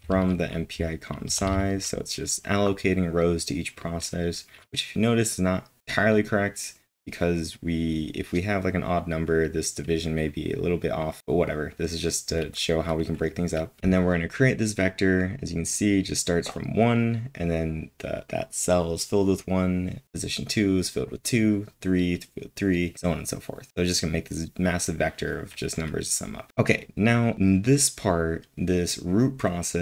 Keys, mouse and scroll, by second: 0.0 w, 1.2 typing, 13.8 typing, 26.5 ctrl+l, 26.5 typing, 27.6 typing.